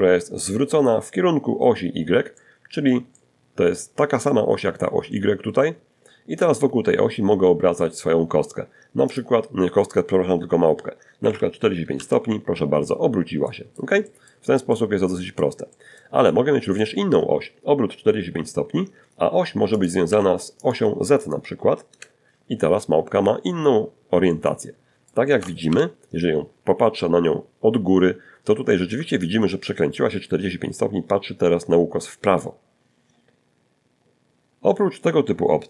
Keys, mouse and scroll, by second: 0.5 middle click, 1.3 middle click, 7.3 click, 9.4 4, 10.2 Return, 10.2 5, 11.6 middle click, 12.2 middle click, 12.7 middle click, 13.3 middle click, 13.9 middle click, 14.4 middle click, 18.0 click, 18.8 click, 18.8 1, 19.4 click, 19.7 0, 20.1 Return, 22.5-23.5 middle drag, 24.0 KP_7, 26.4 scroll down 2, 26.9 shift+middle click, 35.2 click.